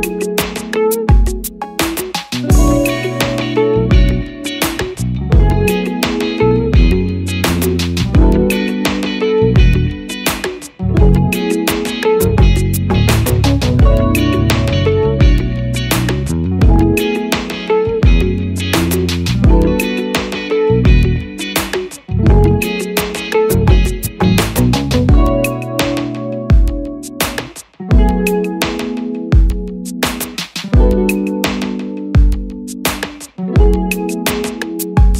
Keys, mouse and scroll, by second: 24.6 double click, 27.0 Return.